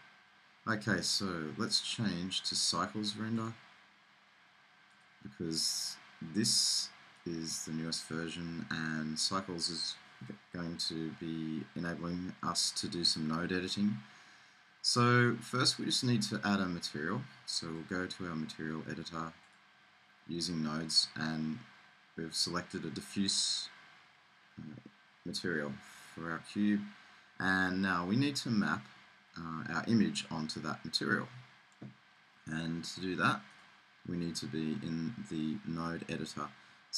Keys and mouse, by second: 1.8-3.6 drag, 3.6 middle click, 7.1 click, 8.0-9.0 drag, 9.0-17.8 middle drag, 17.8-21.3 drag, 21.3-24.8 middle drag, 26.6 click, 33.6-35.4 drag.